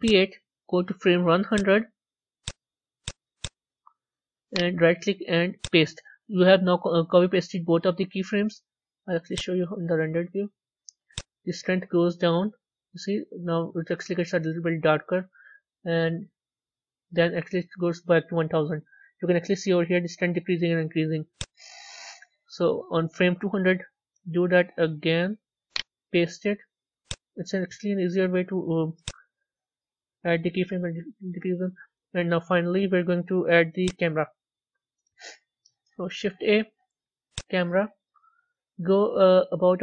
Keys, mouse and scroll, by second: 1.4 click, 3.2 click, 5.5-9.7 right drag, 9.7 z, 10.9-15.0 drag, 21.2-24.2 drag, 25.5-28.7 right drag, 28.7-31.8 drag, 33.8 z, 35.4 a, 37.3 shift+a, 38.4-39.8 middle drag.